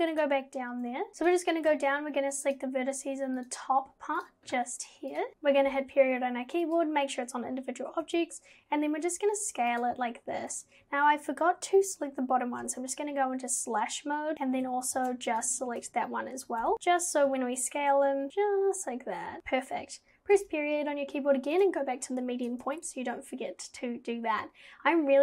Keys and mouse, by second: 1.2 alt+click, 3.4 alt+shift+click, 4.2 alt+shift+click, 5.1 alt+shift+click, 5.3 /, 5.7 ., 8.0 s, 10.6 ctrl+z, 12.6 /, 16.6 /, 17.3 s, 22.5 Tab.